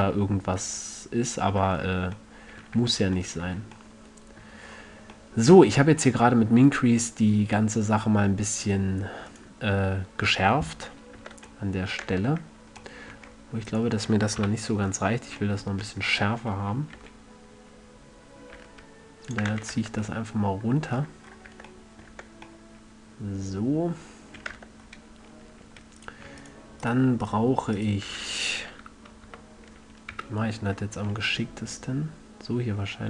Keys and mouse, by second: 3.1 Tab, 3.8 a, 8.2-10.9 middle drag, 10.9-11.5 drag, 11.5 Tab, 12.4 Tab, 14.0 middle click, 14.7 KP_3, 17.3 g, 19.7-20.5 drag, 19.9 a, 20.1 Tab, 21.9 Tab, 22.5 Tab, 24.9 Tab, 25.1-26.3 middle drag, 29.1 KP_7, 29.6 KP_1, 30.5 KP_7, 31.7 e.